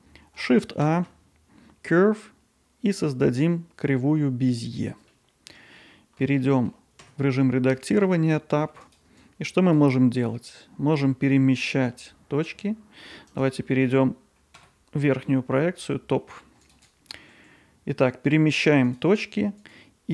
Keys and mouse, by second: 0.9 shift+a, 5.2-6.2 alt+middle drag, 6.4 middle drag, 7.1 Tab, 7.4-7.8 middle drag, 9.3 click, 10.3 g, 13.7 middle click, 14.6 KP_7, 15.3 middle click, 16.7 click, 17.3 g.